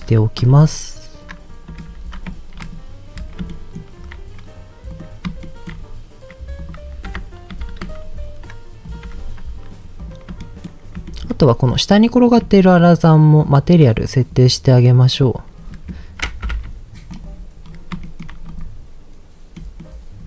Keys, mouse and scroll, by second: 0.3 s, 1.7 click, 1.9 Tab, 2.6 click, 3.1 scroll down 2, 3.5 shift+middle click, 4.9 click, 5.4 shift+middle click, 5.7-6.5 scroll up 2, 6.5 click, 7.1 Tab, 7.5 a, 7.8 s, 8.9 click, 9.0 Tab, 9.7 scroll down 1, 9.9 click, 10.3-10.9 shift+scroll down 3, 10.3-10.7 shift+middle drag, 11.1 shift+middle click, 11.3 scroll up 2, 12.1 click, 12.1 shift+scroll up 1, 12.8 shift+click, 13.4 shift+click, 14.2-15.0 drag, 16.4 ctrl+l, 17.6-17.9 scroll up 2, 18.1 shift+middle drag, 18.5 click, 19.5 middle click, 19.9-20.2 scroll down 3.